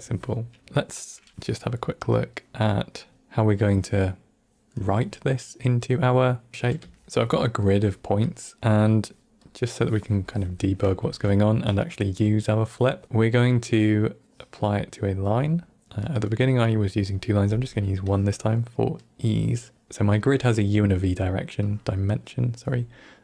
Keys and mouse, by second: 0.6 middle click, 0.6 click, 0.6 n, 2.0 click, 2.9 click, 3.3 middle click, 6.5 middle click, 6.9 ctrl+middle click, 7.0 click, 7.0 g, 7.6 middle click, 8.2 click, 8.8 middle click, 9.4 click, 10.5 middle click, 10.9 shift+a, 16.0 middle click, 17.0 middle click, 18.0 click, 18.9 middle click, 21.6-22.1 drag.